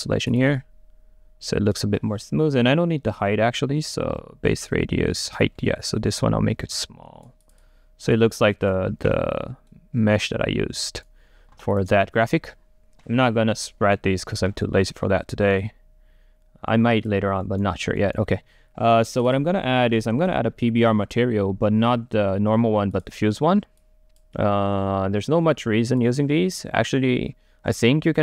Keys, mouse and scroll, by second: 0.4-5.6 drag, 5.6 middle click, 6.1-7.5 right drag, 7.5-9.8 drag, 9.8-11.8 right drag, 11.8-15.8 drag, 15.9-17.5 drag, 17.5-19.3 right drag, 19.4-21.5 drag, 23.1 click, 23.9-28.2 drag.